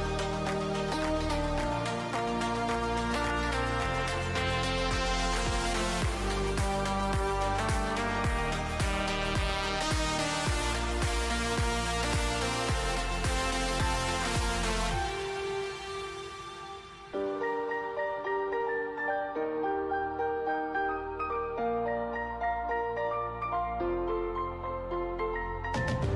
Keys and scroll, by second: 1.3-2.2 typing, 3.5-6.4 typing, 7.8 c, 9.9-10.8 typing, 12.8-17.5 typing, 19.7 c, 20.5 h, 22.4-23.5 typing, 25.4-26.1 typing.